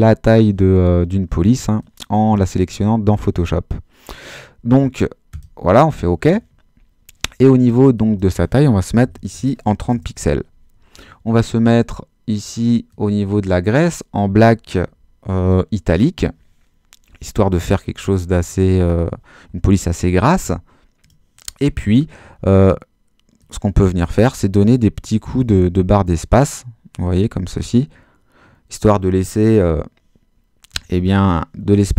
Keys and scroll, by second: 9.0 3, 9.3 0, 9.9 Return, 24.3 space.